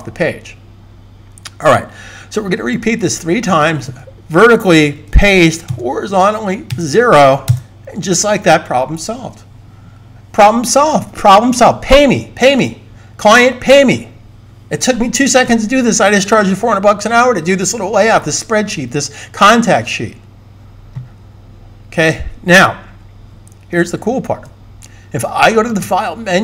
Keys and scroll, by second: 4.9 super+v, 6.6 0, 24.2 super+s.